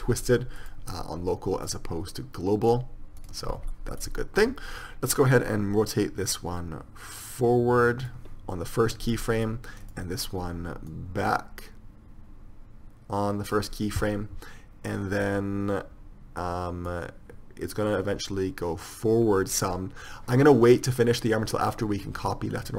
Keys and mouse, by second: 2.0-8.3 drag, 9.3-11.2 middle drag, 11.8 click, 17.2-20.4 drag.